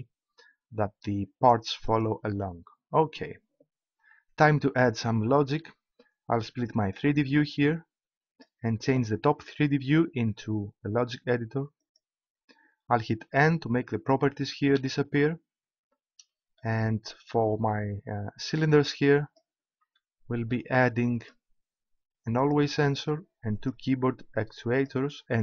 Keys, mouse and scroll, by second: 2.0-3.9 right drag, 6.9-8.9 drag, 11.9-13.2 drag, 14.8 n, 18.5-20.3 drag, 21.1 click, 22.5 click.